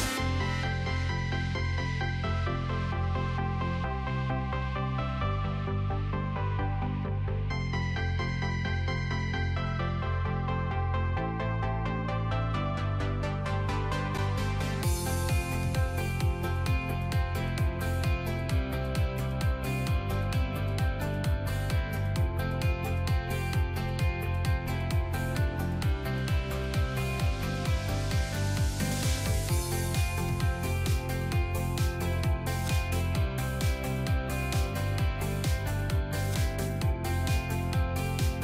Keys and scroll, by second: 12.7 shift+space.